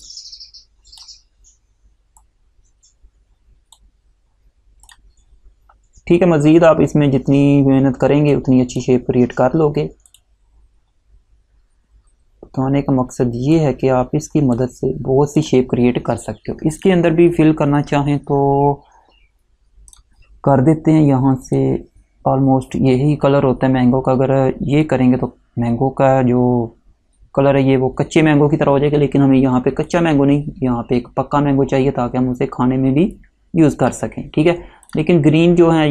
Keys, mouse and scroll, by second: 6.7-7.1 alt+scroll down 1, 8.4 click, 13.7 click, 20.0 click, 24.9 click, 30.0 click, 33.3 click.